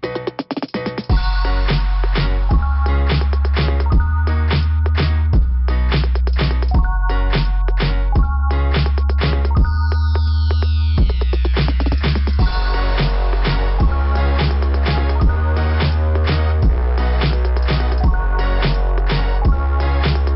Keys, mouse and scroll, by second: 2.3 click, 2.3 ,, 2.6 click, 3.2 click, 3.5 click, 7.6 click, 8.2 click, 9.0 click, 9.7 click, 10.4 click, 10.8 click, 10.9 click, 11.3 click, 11.4 click, 11.8 click, 11.8 click, 12.2 click, 12.3 click, 13.0 click, 13.0 click, 13.8 click, 13.9 click, 15.7 click, 16.4 scroll down 2, 17.1 click, 17.4 click, 18.9 click, 19.0 click.